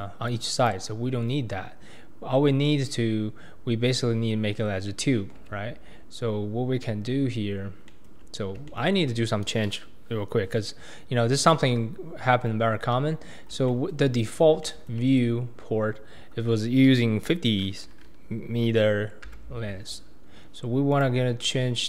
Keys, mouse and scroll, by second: 0.3 click, 1.1-1.4 scroll up 2, 1.4-2.3 scroll down 2, 4.2-4.6 scroll up 1, 4.6-5.4 scroll down 1, 5.4 Tab, 5.9-6.3 scroll up 2, 6.3-7.1 scroll down 3, 7.1-10.9 shift+middle drag, 10.9-12.4 scroll down 1, 12.4-12.9 scroll down 1, 12.9 KP_1, 13.4 scroll down 1, 13.7-14.1 shift+middle drag, 14.1-14.6 scroll up 5, 14.6-15.0 shift+middle drag, 15.0-17.5 scroll up 5, 19.3 n, 20.9 click.